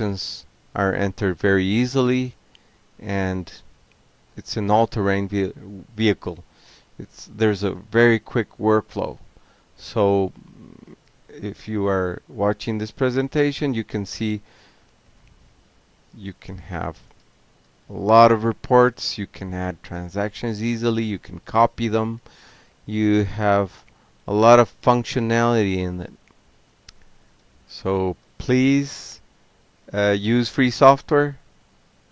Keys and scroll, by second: 0.2 alt+q, 0.9 ctrl+c, 3.4 ctrl+g, 4.0 ctrl+p, 6.2 ctrl+c, 6.5 ctrl+p, 9.4 Return, 16.7 ctrl+c, 17.0 ctrl+a, 17.4-18.3 typing, 19.6-23.2 typing, 23.7 Return, 24.8-25.5 typing, 28.1 Tab, 29.3-32.1 typing.